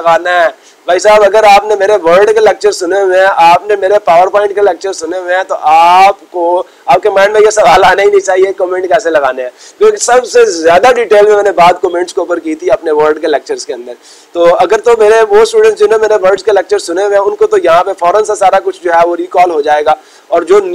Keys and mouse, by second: 0.1 click, 2.2 click, 2.6 click, 3.1 click, 8.5-9.6 drag, 16.9 click, 18.9 click, 19.3 click.